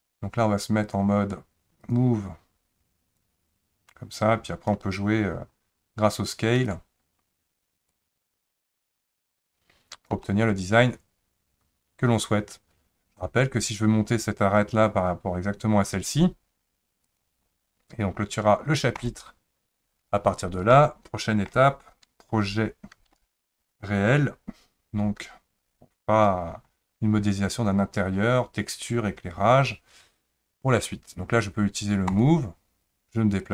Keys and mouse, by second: 1.9 click, 3.3-4.7 drag, 8.1-10.1 drag, 10.2-13.2 middle drag, 14.6 click, 19.0 click, 20.7 shift+middle click, 32.1 click.